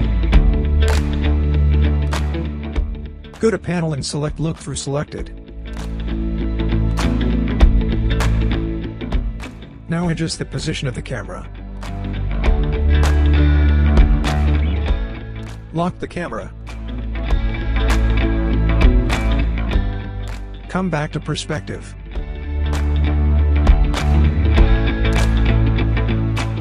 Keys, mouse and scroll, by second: 3.2-4.3 scroll down 1, 4.6-5.8 alt+middle drag, 6.1 scroll up 2, 6.5 alt+middle click, 6.6-7.2 alt+middle click, 7.2-8.8 alt+drag, 9.0 alt+scroll up 1, 9.8-10.4 alt+click, 10.7-11.3 alt+middle click, 11.6-12.0 scroll down 1, 12.2-12.8 alt+middle click, 13.4-13.9 scroll down 1, 14.4-15.4 alt+middle drag, 18.9 click, 22.4-22.8 scroll down 1, 22.8 scroll up 1, 23.2-24.2 alt+click, 24.3 scroll up 1, 24.6-25.2 alt+drag.